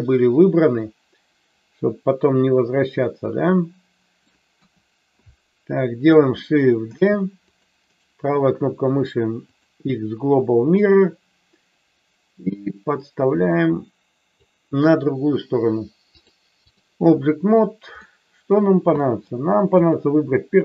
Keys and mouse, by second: 4.6 KP_1, 6.8 shift+d, 7.4 click, 10.8-14.3 drag, 16.2 click, 18.0-18.4 middle drag, 19.0 middle click, 19.6 click.